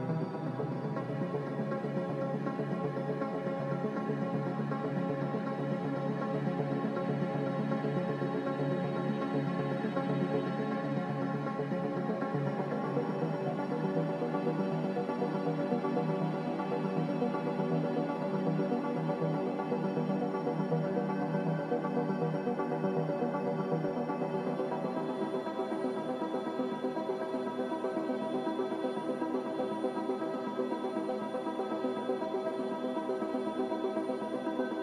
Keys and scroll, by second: 17.9 z, 21.0-21.7 typing, 30.5-31.3 typing.